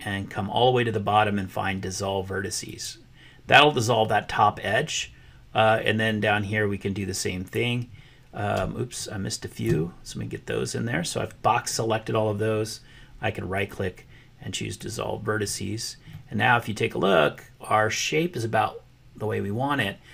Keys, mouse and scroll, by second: 2.7 click, 6.2-7.6 drag, 8.9 shift+click, 13.6-15.0 drag, 16.1-20.1 middle drag.